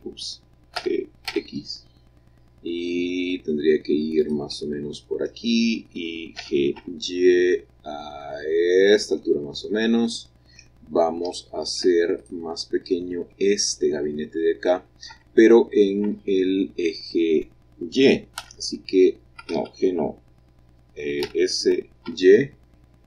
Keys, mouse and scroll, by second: 1.2 g, 4.1-5.2 drag, 4.4-6.1 middle drag, 6.3 g, 6.7 y, 8.8-10.8 drag, 10.8-12.1 scroll up 3, 12.1 click, 13.4 middle click, 15.0 middle click, 15.9 Tab, 18.3 g, 19.3 Escape, 21.1 s, 22.0 y.